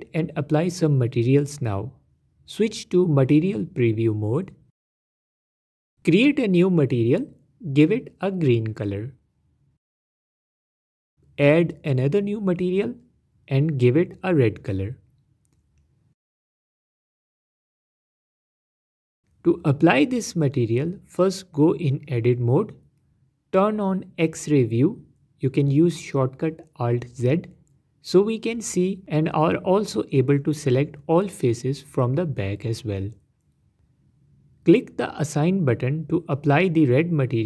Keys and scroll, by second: 4.6 z, 9.6 e, 21.3 Tab, 24.2 z, 35.8 Tab.